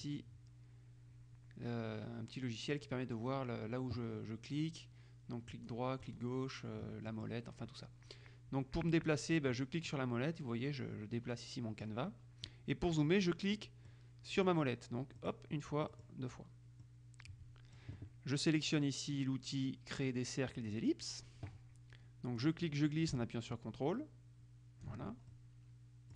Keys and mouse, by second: 0.2 click, 1.9-3.3 drag, 5.7-6.8 drag, 6.2 right click, 7.3 click, 10.0-12.5 drag, 14.0-15.1 drag, 15.3 click, 16.1 click, 17.0-18.4 drag, 20.7 click, 22.5-25.5 drag.